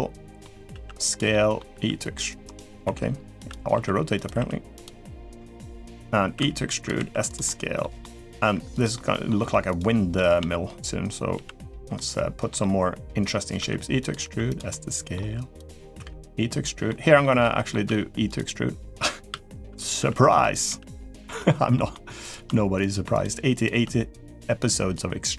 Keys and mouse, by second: 0.5 s, 1.1 middle click, 1.5 r, 2.6 e, 3.7 s, 4.1 r, 5.3 shift+middle click, 6.1 e, 6.7 s, 7.2 middle click, 7.8 middle click, 8.4 r, 8.7 middle click, 9.8 g, 10.0 middle click, 11.1 g, 11.7 middle click, 12.4 middle click, 13.3 e, 14.0 s, 14.5 middle click, 15.3 r, 15.7 e, 16.6 middle click, 17.2 middle click, 17.6 e, 19.1 e, 20.4 s, 20.4 g, 21.5 middle click, 22.5 shift+click, 22.9 click, 23.3 click.